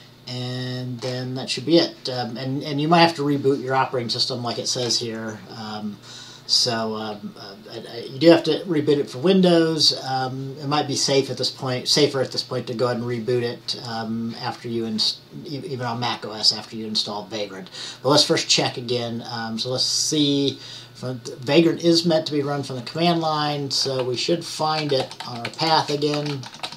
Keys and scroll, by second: 1.4 typing, 24.3-26.7 typing.